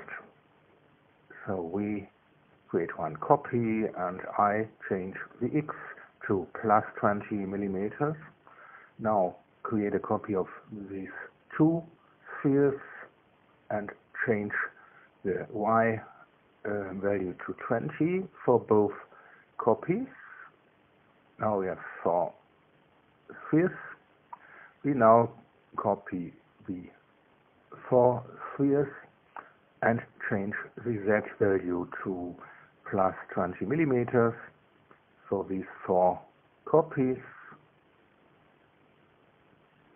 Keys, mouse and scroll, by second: 0.9 ctrl+c, 2.4 ctrl+v, 3.2 click, 5.5 click, 6.6 KP_2, 6.8 KP_0, 7.3 KP_Enter, 9.4 click, 10.0 shift+click, 10.8 ctrl+c, 11.5 ctrl+v, 12.8 click, 17.2 click, 17.9-18.8 typing, 20.4 click, 21.4 click, 22.5 click, 23.4-24.3 typing, 26.1 click, 27.4 shift+click, 28.6 ctrl+c, 29.0 ctrl+v, 30.3 click, 33.4 click, 35.0-35.9 typing, 37.3 click, 38.5 click.